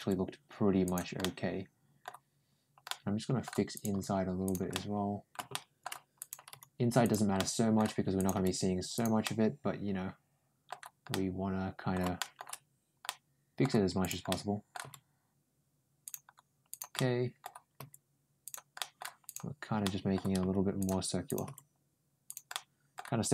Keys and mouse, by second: 1.0 middle click, 2.7 middle click, 3.6 click, 3.7 g, 4.5 middle click, 5.3 middle click, 6.0 click, 6.3 g, 7.2 middle click, 8.0 click, 8.2 g, 9.1-10.5 middle drag, 10.9 middle click, 12.0 shift+middle click, 12.9 middle click, 13.8 click, 14.1 middle click, 14.7 g, 16.5 click, 16.8 middle click, 17.6 g, 18.6 middle click, 19.1 click, 19.6 middle click, 20.2 g, 21.1 click, 21.3 g, 22.4 middle click.